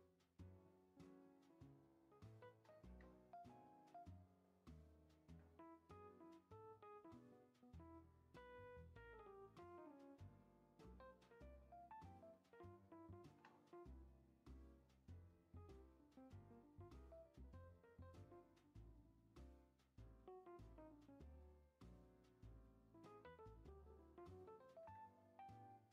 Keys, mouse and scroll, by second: 0.2-0.6 middle drag, 0.6-0.9 scroll down 3, 1.2 r, 7.9-8.4 drag, 8.4 space, 10.9-11.7 middle drag, 11.7-12.1 drag, 12.1 middle drag, 12.3-13.1 scroll up 1, 13.1 g, 15.9-20.1 drag.